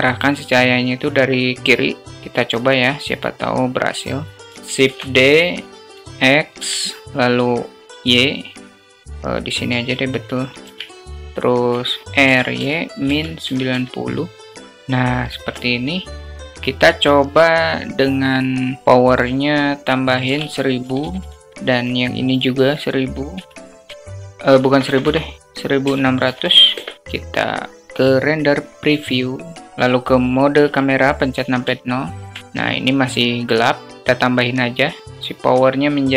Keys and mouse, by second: 2.0 s, 4.7 shift+d, 6.7 alt+click, 7.4-9.7 drag, 9.9 alt+middle click, 10.5 ctrl+z, 11.2 alt+middle click, 12.0 r, 14.5 click, 15.7 alt+click, 15.9 alt+middle click, 16.4 click, 18.8-21.5 drag, 20.8 0, 21.6 click, 22.6-26.7 drag, 23.9 0, 24.6 BackSpace, 26.2 0, 30.5 KP_0, 31.6-32.1 alt+shift+drag, 33.9 click, 35.1-36.1 drag.